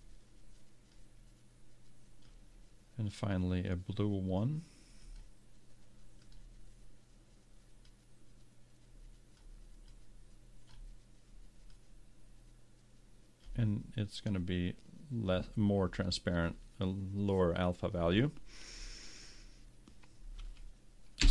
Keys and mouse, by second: 0.9-2.9 drag, 5.1-8.1 drag.